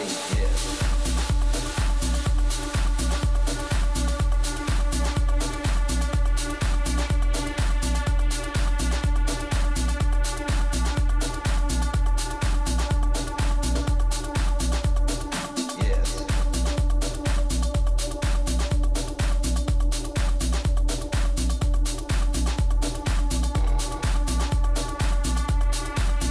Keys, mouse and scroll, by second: 5.4-7.2 middle drag, 12.1-14.9 middle drag, 16.1 a, 16.4 a, 18.1-20.0 drag, 18.8 right click, 20.0-21.6 middle drag, 22.2-25.0 right drag, 24.5 a, 25.3-26.3 drag.